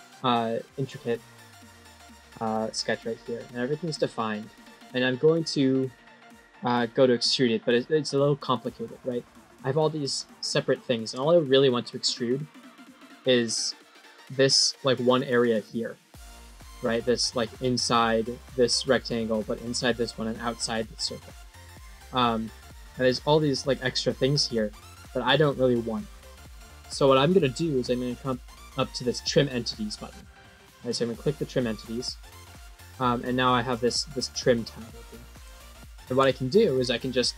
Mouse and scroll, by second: 12.8 scroll down 3, 13.6 scroll up 1, 22.0 middle click, 22.1 middle click, 30.6 click, 31.6 click, 33.2 middle click, 35.4 middle click.